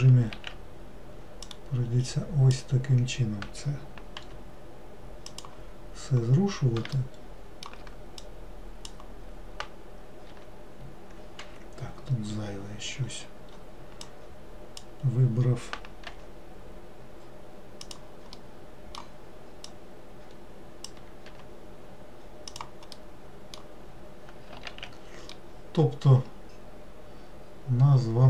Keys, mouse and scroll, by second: 1.6 click, 7.1-8.3 shift+middle drag, 8.3 click, 12.5-14.2 scroll up 5, 14.2 click, 18.6-19.8 middle drag, 19.8 click, 23.1 middle click, 24.1-24.4 scroll down 2, 24.8 alt+z, 25.5-28.2 middle drag.